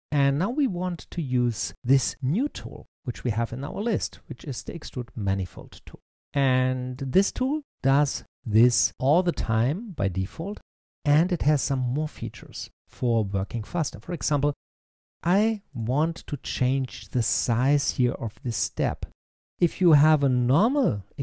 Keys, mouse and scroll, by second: 1.1-2.0 scroll down 2, 2.0-3.4 middle drag, 3.4-6.2 drag, 7.6-10.2 middle drag, 12.7-13.0 scroll down 2, 13.0-15.6 middle drag, 15.6 click.